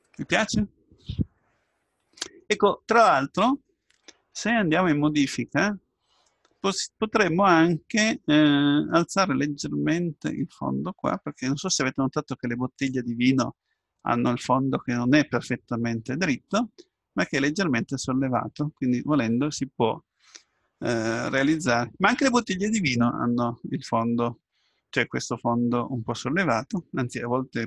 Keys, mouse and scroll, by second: 4.5 Tab, 6.3-8.3 middle drag, 9.1-10.9 drag, 16.6-18.7 middle drag, 21.1-24.3 middle drag.